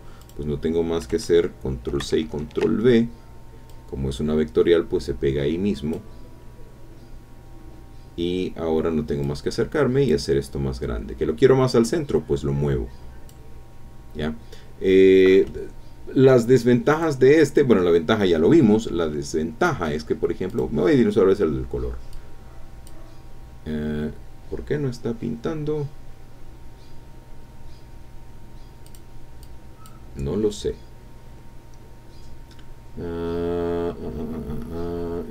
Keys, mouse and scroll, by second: 0.2 click, 1.9 ctrl+c, 2.2 ctrl+v, 3.7-6.1 drag, 6.3 scroll up 1, 8.3-8.6 scroll up 1, 9.2 click, 10.3-10.8 scroll down 2, 11.8-13.5 drag, 16.9 click, 19.7 scroll up 1, 20.5 click, 22.1 click, 28.8 click, 29.4 click.